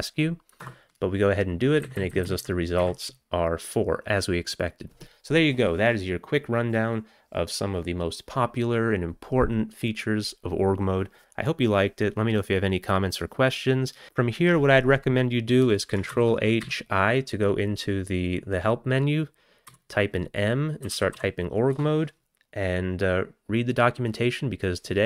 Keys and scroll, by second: 0.6 Return, 1.9 Down, 2.0 Down, 2.1 Down, 2.3 Down, 2.4 Down, 2.8 Up, 16.1 ctrl+h, 16.6 i, 19.7-21.6 typing, 21.7 Return.